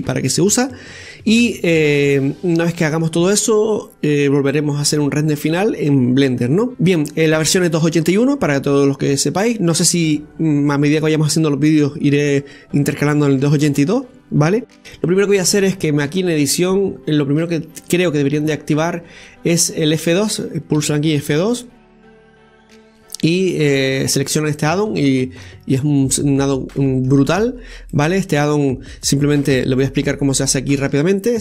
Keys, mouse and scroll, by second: 16.2-19.3 drag, 26.3-26.7 scroll down 1, 26.7-27.2 middle drag, 27.2-27.9 scroll up 2, 27.9-29.5 middle drag, 29.5 KP_7, 30.5-31.3 shift+middle drag, 31.3 click.